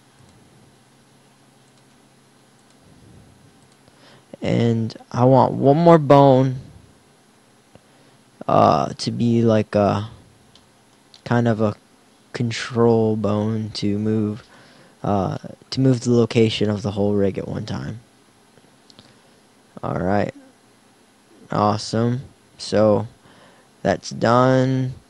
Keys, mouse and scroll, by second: 0.3 middle click, 0.9 g, 1.9 s, 2.9 g, 3.8-5.5 drag, 6.1 shift+d.